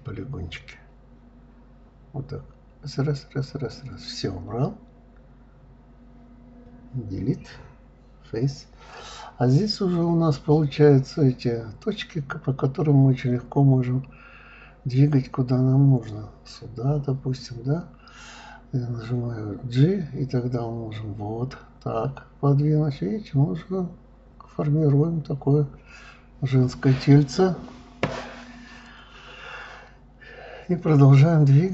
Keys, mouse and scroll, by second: 0.6 click, 1.0 shift+click, 1.6 shift+click, 2.0 shift+click, 2.4 shift+click, 2.8 shift+click, 3.2 shift+click, 3.4-5.0 middle drag, 5.7 Delete, 6.8 middle click, 7.7-8.2 scroll up 4, 8.2-9.7 middle drag, 10.3 click, 11.2 click, 11.8 drag, 13.3 g, 16.5 click, 17.1 click, 19.1 g, 20.8-22.3 middle drag, 23.2-23.5 scroll down 1, 23.5-25.1 middle drag, 26.0 click, 26.7-28.0 middle drag, 28.0 g, 30.1 click, 30.4-31.7 middle drag.